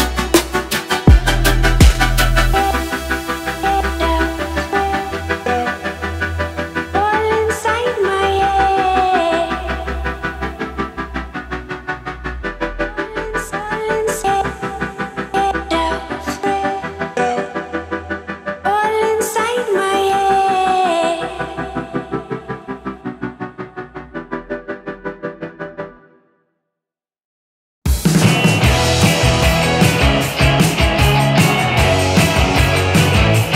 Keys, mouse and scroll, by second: 0.1 ctrl+click, 2.0 p, 3.4-4.1 drag, 28.5-30.9 drag.